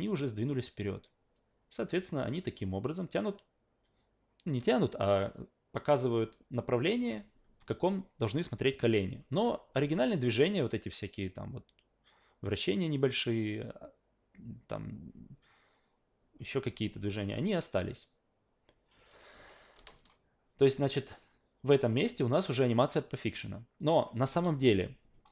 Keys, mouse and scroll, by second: 10.6-16.4 drag, 17.9-18.9 drag, 19.9 alt+middle click, 21.2-23.8 drag, 24.5 a.